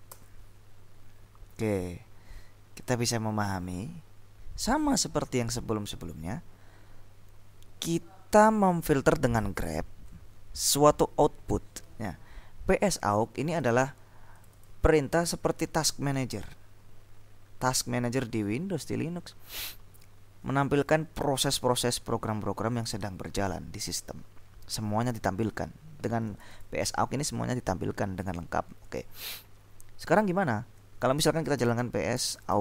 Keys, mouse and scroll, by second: 0.3 Return, 13.5 click, 14.5-15.9 drag, 26.4 click, 28.9 click, 31.5-32.6 typing.